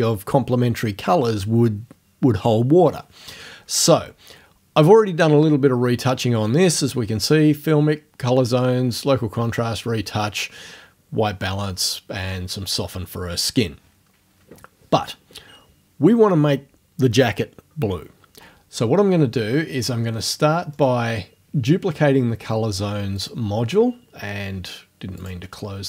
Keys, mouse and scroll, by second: 20.7 middle click, 23.2 click, 25.2 click.